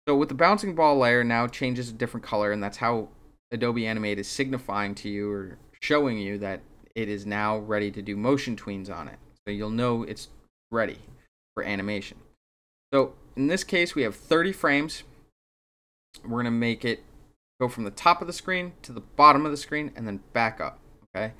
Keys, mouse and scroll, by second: 1.4 click, 12.4-12.9 drag.